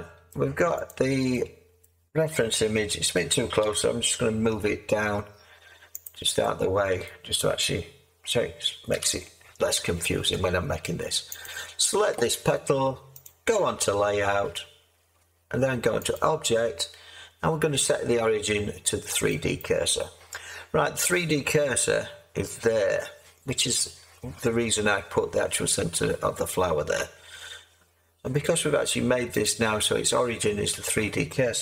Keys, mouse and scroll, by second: 3.6 g, 4.5 z, 8.9 z.